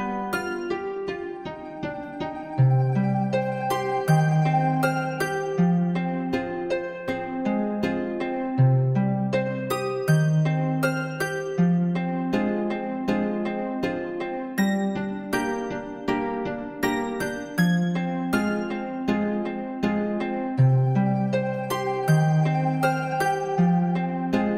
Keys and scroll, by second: 7.6 ctrl+-.